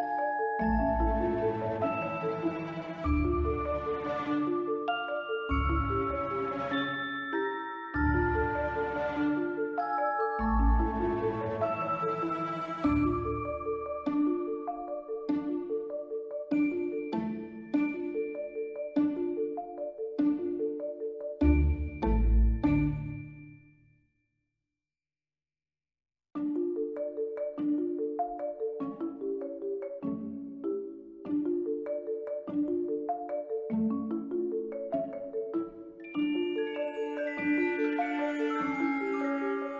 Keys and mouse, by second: 0.9 click, 1.7 ctrl+middle click, 2.9 shift+middle click, 3.6 click, 3.8 b, 5.1 s, 6.1 click, 6.8 click, 8.0 b, 9.3 click, 10.5 s, 11.1 click, 11.9 Tab, 13.3-14.8 right drag, 15.7-16.7 drag, 17.8 click, 18.6 Tab, 20.6 b, 22.6 s, 23.9 click, 24.5 click, 25.8 ctrl+z, 26.2 click, 27.8 ctrl+r, 29.4 click, 30.3 b, 31.0 s, 31.9 click, 32.5-34.6 drag, 35.3 b, 36.5 click, 37.5 s, 38.3 click, 38.8 b.